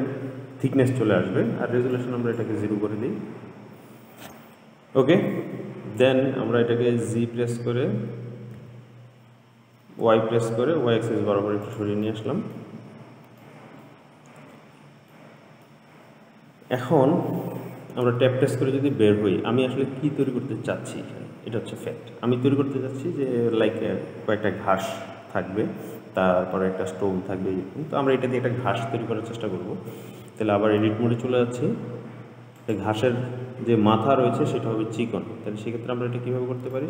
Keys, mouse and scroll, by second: 2.2-5.2 drag, 5.6-7.3 middle drag, 7.3 g, 12.3 middle click, 13.0-13.7 scroll down 4, 13.7 middle click, 14.3-15.4 scroll up 2, 15.4 middle click, 16.2-16.9 scroll up 2, 16.9-18.3 scroll down 1, 18.3 Tab, 19.2-22.2 middle drag, 30.9 Tab, 32.9 click, 35.2-35.8 scroll up 2, 35.8-36.8 scroll down 1.